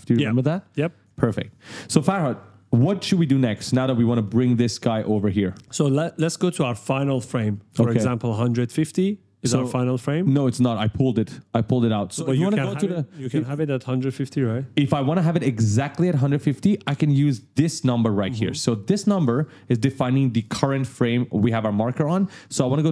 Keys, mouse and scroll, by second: 1.2-1.5 ctrl+scroll down 1, 2.0-2.3 ctrl+scroll down 1, 3.8 right click, 3.9 s, 4.8 right click, 4.9 d, 5.6 right click, 22.3 click.